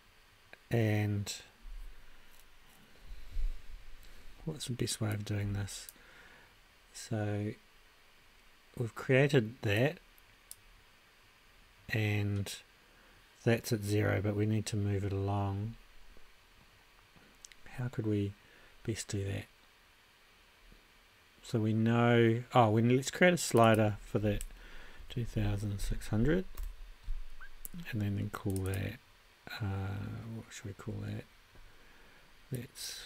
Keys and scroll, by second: 24.8-26.3 typing, 26.6 Return.